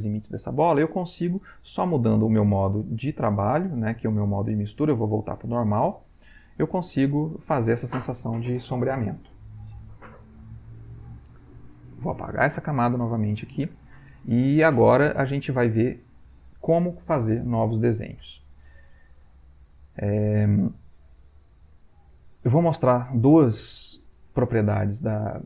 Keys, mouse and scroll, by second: 2.0-5.0 drag, 5.9 shift+click, 12.6 click.